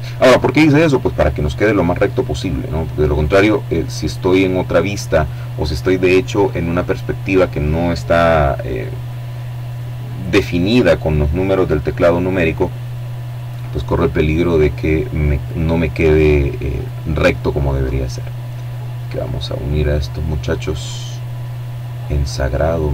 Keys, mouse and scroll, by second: 2.5 click, 15.2 right click, 16.3-20.4 drag, 20.7 right click, 22.2-22.9 drag.